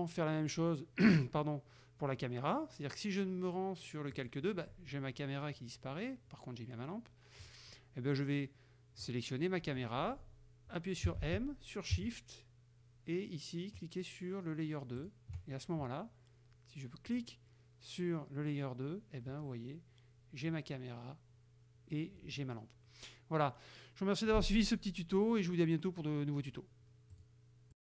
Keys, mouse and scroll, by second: 4.2 click, 7.5 click, 9.1 right click, 11.1 m, 15.0 shift+click, 17.2 click, 27.2 click, 27.8 click.